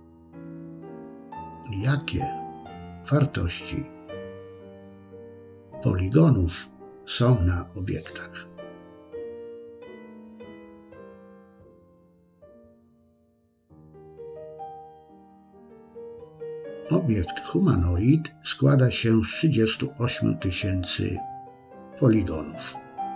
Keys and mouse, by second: 1.8 click, 4.9 shift+c, 15.6 click.